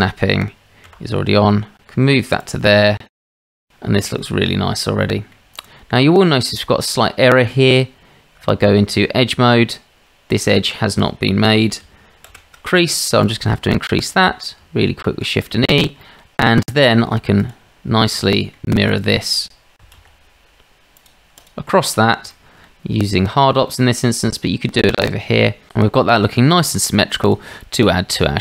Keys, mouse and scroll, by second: 0.9 g, 3.1 Tab, 3.4 click, 3.6 shift+middle drag, 4.1 shift+middle click, 5.9 middle click, 6.3 shift+middle drag, 7.4 Tab, 10.3 click, 12.2 shift+e, 14.6 Tab, 16.0 middle click, 16.6 shift+drag, 17.4 drag, 18.3 shift+click, 18.9 shift+click, 19.9 alt+x, 20.9 alt+x, 20.9 click, 21.4 click, 22.3-22.9 shift+drag, 23.7-24.1 drag, 24.1 middle click.